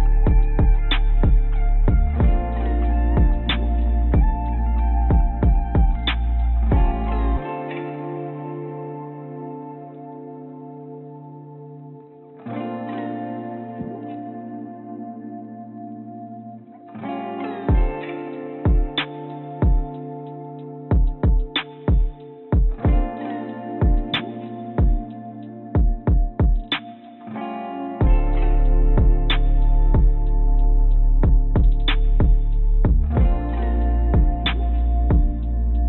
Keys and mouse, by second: 0.1 ctrl+z, 0.2 ctrl+z, 1.2 Tab, 1.6 click, 3.7 click, 4.5 click, 6.0 click, 6.4 click, 7.3-10.9 drag, 11.4 click, 12.6 click, 13.2-14.8 drag, 15.5 click, 16.4 click, 18.1-23.0 drag, 24.2 a, 25.0 click, 26.4 click, 26.8 click, 27.0 a, 27.4 click, 27.6-29.5 drag, 30.9 click, 31.3 click, 31.5 click, 31.7 click, 32.1 click, 32.5 click, 33.3 click, 34.2 click, 35.3 a.